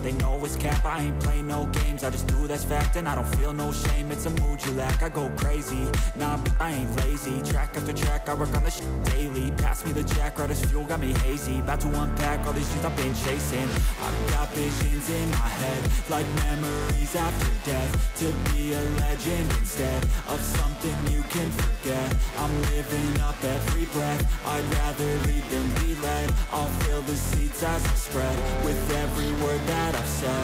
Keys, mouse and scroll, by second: 1.8 right click, 3.4 right click, 3.9-4.4 ], 5.1 ], 5.2 ], 5.5 ], 7.4 ctrl+z, 20.6 right click.